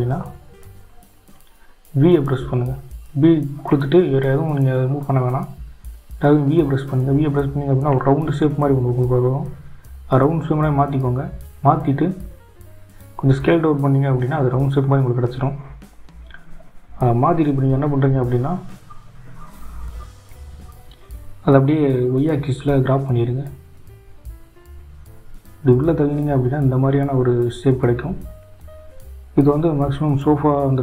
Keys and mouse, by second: 16.7 g.